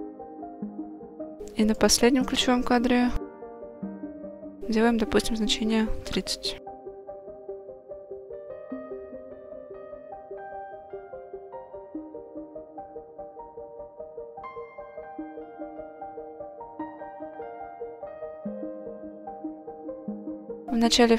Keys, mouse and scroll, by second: 4.1-7.6 drag, 9.5-11.8 drag, 12.3-12.7 scroll down 2, 13.1-14.0 drag, 15.2 click, 20.4 click.